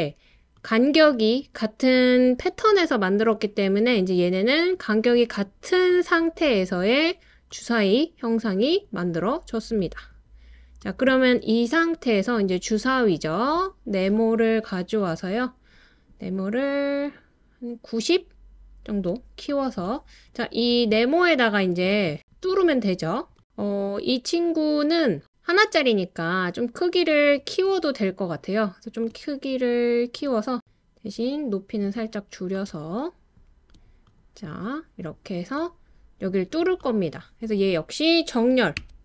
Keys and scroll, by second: 38.9 l.